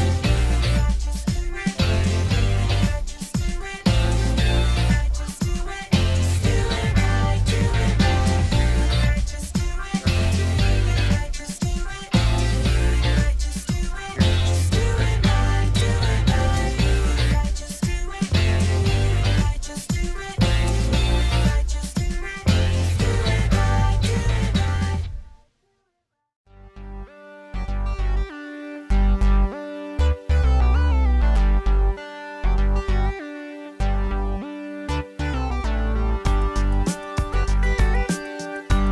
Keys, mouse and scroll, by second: 23.3-25.0 drag.